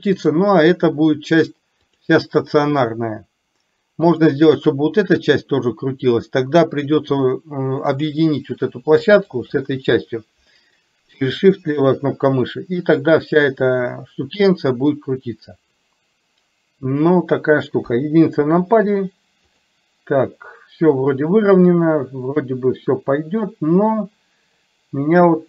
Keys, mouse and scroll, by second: 0.2 click, 1.9 click, 6.9 click, 9.4 shift+click, 17.9 KP_1, 19.7 click.